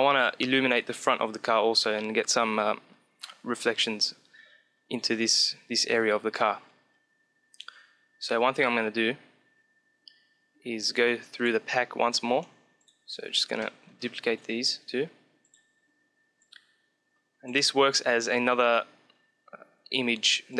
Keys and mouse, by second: 7.4-9.5 drag, 9.5-10.7 middle drag, 10.7 click, 12.0-15.4 drag, 13.4-14.4 right drag, 14.4 shift+d, 15.4 middle click, 16.3 click, 18.8-20.4 middle drag, 20.4 click.